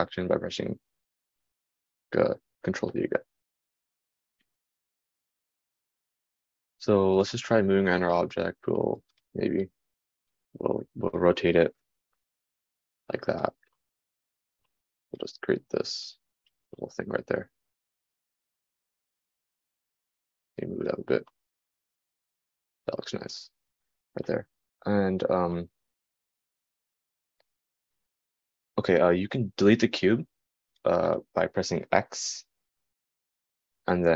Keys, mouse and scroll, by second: 15.3 super+z.